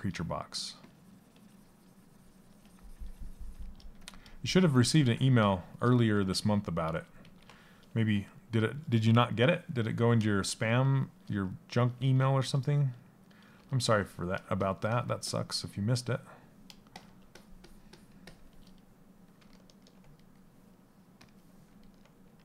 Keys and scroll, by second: 3.4 a, 5.9 ctrl+z, 6.4 ctrl+z.